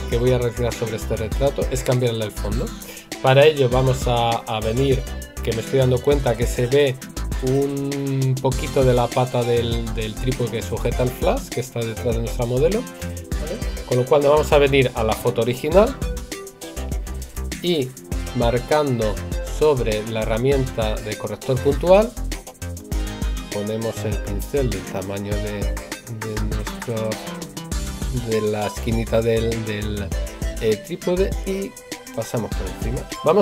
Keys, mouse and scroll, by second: 24.0 right click.